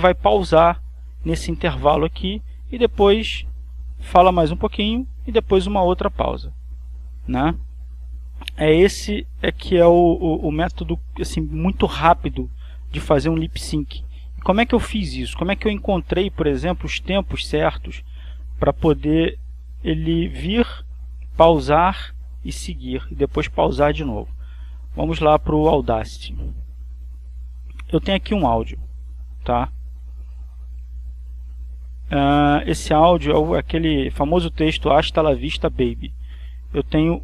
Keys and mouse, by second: 14.8-17.3 drag, 20.4-22.5 drag, 26.4 click, 27.4 click, 31.6 click, 33.4 click, 34.4 click, 34.9-37.2 middle drag.